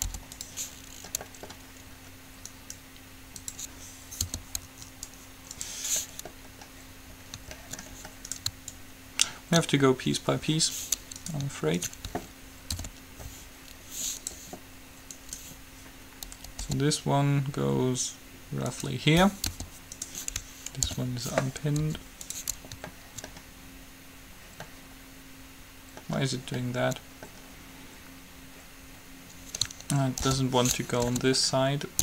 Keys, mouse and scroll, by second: 0.2 u, 1.1-2.7 middle drag, 2.7-4.6 right drag, 4.6 p, 5.1-6.1 right drag, 6.1-9.8 middle drag, 8.9-10.6 drag, 8.9-10.2 right drag, 11.4-13.8 right drag, 12.9 alt+p, 14.4-16.1 right drag, 16.9 g, 19.6 p, 20.1-21.8 right drag, 21.1 alt+p, 22.1 u, 23.1-28.8 middle drag, 30.6 ctrl+l, 31.2 s.